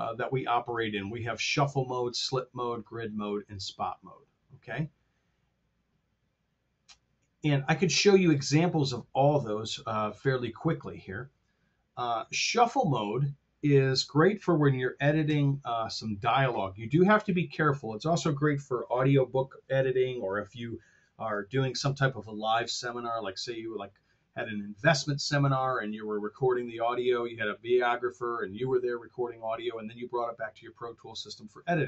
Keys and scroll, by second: 15.2 F7.